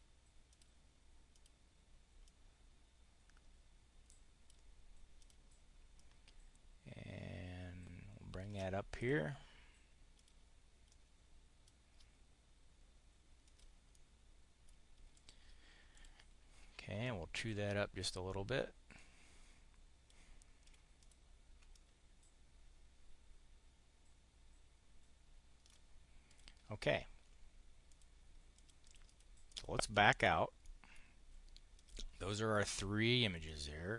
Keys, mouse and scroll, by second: 0.2 click, 1.1 click, 2.2-4.5 drag, 5.1 click, 5.9-8.5 ctrl+drag, 8.8 click, 10.1 click, 10.7 click, 13.3 click, 13.7 click, 14.8 click, 15.8 click, 16.9-20.1 drag, 20.6 click, 20.9 click, 21.6-25.7 ctrl+drag, 26.1 click, 27.8 click, 28.4 click, 29.3 click, 29.8 click, 30.5 click, 31.5 click, 33.3 click, 33.8 click.